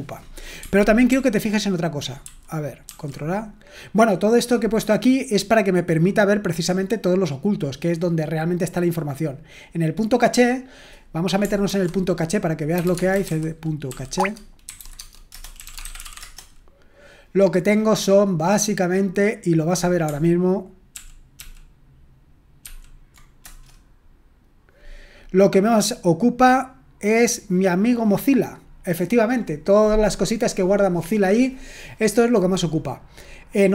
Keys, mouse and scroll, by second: 1.1 ctrl+p, 2.2 ctrl+n, 2.8 ctrl+a, 5.8 click, 9.5 click, 10.5 click, 11.6 ctrl+c, 12.5-16.7 typing, 14.1 Tab, 18.2-19.1 scroll up 1, 19.1-20.0 scroll down 1, 20.9 ctrl+p, 21.4 ctrl+p, 22.6 ctrl+p, 23.4 Return, 27.0-33.7 drag.